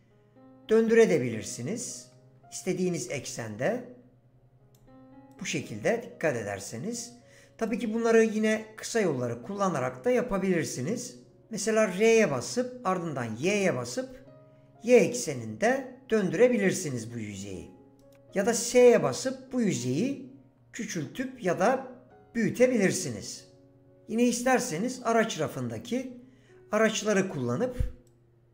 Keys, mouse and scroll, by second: 0.7 click, 3.0 ctrl+z, 3.5 click, 5.3 click, 11.9 r, 13.4 y, 18.0 right click, 18.8 s.